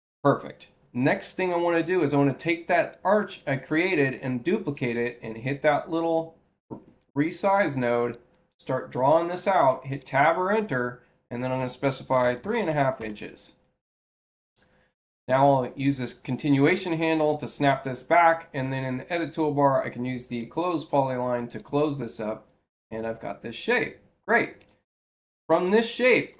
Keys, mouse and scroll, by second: 2.6 click, 4.0 c, 7.0 6, 8.0-9.1 drag, 9.6 Return, 13.6 6, 15.7-17.2 drag, 21.4 click, 25.4 click.